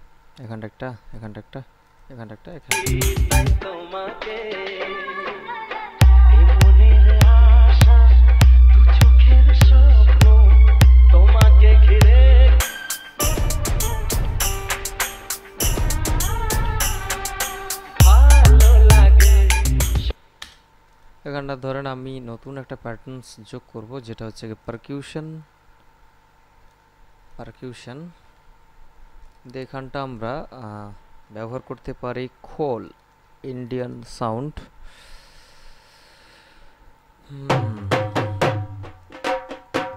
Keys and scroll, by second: 2.8 space, 20.2 space.